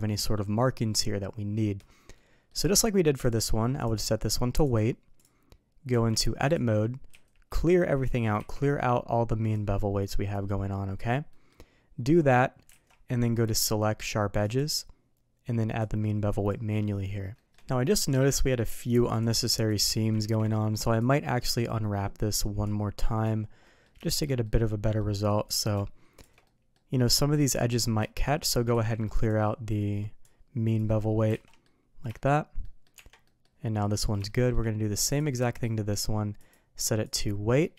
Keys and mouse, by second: 2.1-2.4 middle drag, 3.2 click, 4.7-5.2 drag, 5.8 Tab, 7.0 a, 8.3 n, 9.5 click, 10.6 middle click, 11.2 middle click, 12.6 alt+a, 13.5-14.5 drag, 15.7 click, 17.3 shift+middle click, 17.9 middle drag, 18.3 shift+middle drag, 19.6 shift+click, 20.1 ctrl+e, 22.6 click, 23.6 middle click, 24.0 shift+middle click, 24.4 middle click, 25.4 click, 26.1 shift+click, 26.4 middle click, 27.4 middle click, 27.9 shift+middle click, 28.7 ctrl+e, 30.2 click, 31.2 alt+a, 31.4 middle drag, 32.1 shift+middle drag, 32.6 middle drag, 32.9 Tab, 33.2 middle drag, 34.2 shift+middle drag, 35.0 click, 35.4 middle drag, 36.3-37.1 drag, 37.4 middle drag.